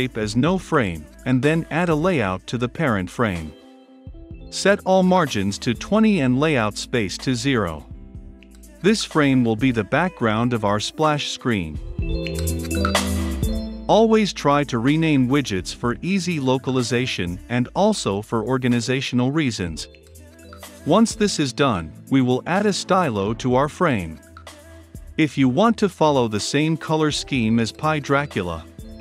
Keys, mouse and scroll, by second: 2.2 click, 10.9-12.8 typing, 13.7 click, 17.5-20.1 typing, 23.8 middle click, 23.8-24.6 scroll down 2, 26.3-28.2 typing.